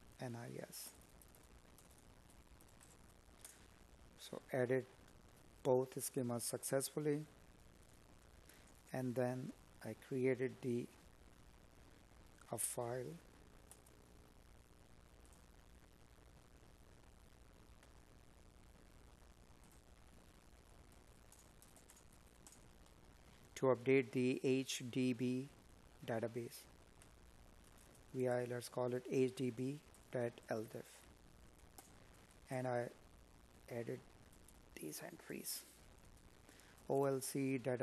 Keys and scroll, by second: 21.5 space, 29.7 space.